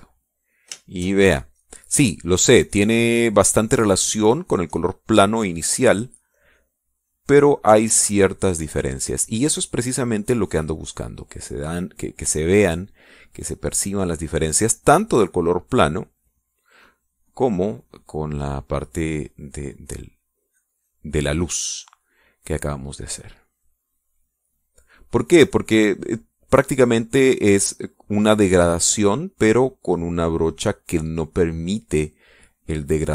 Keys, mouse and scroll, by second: 1.7 shift+click, 2.2-9.5 shift+drag, 10.1 middle click, 10.9 middle click, 12.9-17.5 drag, 17.7-19.0 drag, 19.3-22.3 drag, 22.7 middle click, 23.7-25.3 drag, 26.5-31.2 drag.